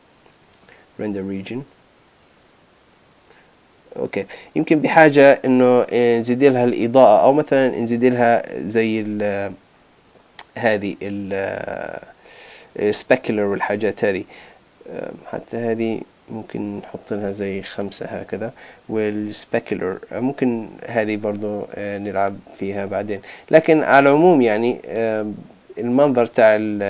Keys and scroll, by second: 17.8 Return.